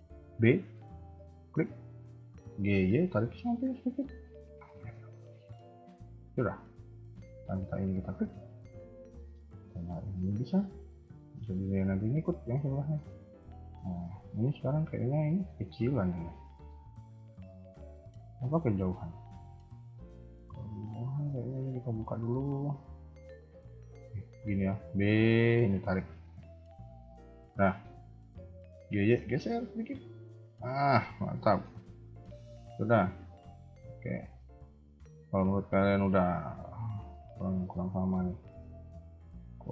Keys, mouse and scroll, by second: 2.4 g, 4.5 scroll down 2, 4.9 shift+middle click, 7.9 alt+click, 8.3 shift+middle click, 8.6-8.9 scroll up 2, 9.8 click, 10.4 s, 14.9 scroll down 2, 15.2 shift+middle click, 15.6-16.1 scroll up 2, 16.8-17.2 scroll down 2, 17.2 shift+middle click, 17.6-18.0 scroll up 1, 19.7 a, 19.9 a, 20.1 scroll down 2, 20.5 b, 21.8-23.0 scroll up 3, 23.8-24.1 scroll down 3, 24.0 a, 24.1 a, 24.6 b, 26.3-26.9 scroll up 2, 26.9 scroll up 2, 27.5 shift+middle click, 28.7 g, 30.9-31.3 scroll down 3, 31.3 shift+middle click, 31.7 scroll up 1, 32.0 a, 32.2 a, 32.8 alt+click, 33.2 shift+middle click, 33.2 shift+scroll up 1, 34.0 a, 34.1 a, 34.4 scroll down 1, 34.8 shift+middle click, 35.4 scroll up 1, 36.4 alt+click, 37.0 s, 38.6 alt+click, 39.2 s.